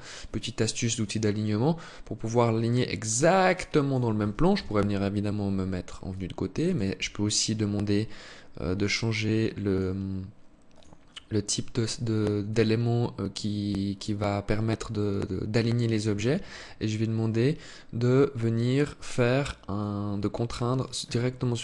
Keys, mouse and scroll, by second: 4.1 KP_3, 5.6 alt+click, 8.8 click, 10.2 click, 21.0 alt+click.